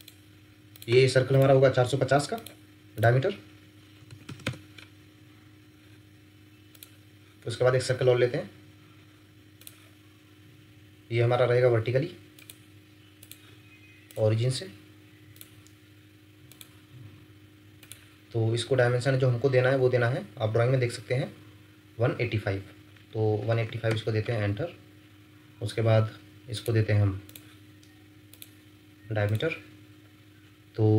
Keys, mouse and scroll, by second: 4.0 typing, 4.4 Return, 8.3 scroll down 1, 23.3-23.6 typing, 23.9 Return.